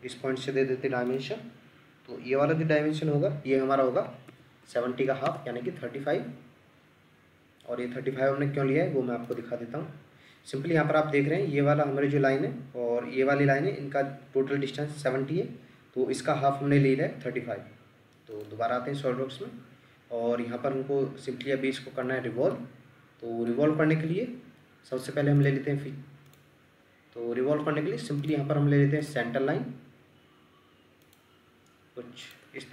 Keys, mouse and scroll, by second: 3.9-5.0 typing, 5.2 Return, 19.1-20.6 scroll up 1, 20.6-21.2 scroll down 1, 21.7 Escape, 22.5 ctrl+middle click, 32.6 Escape.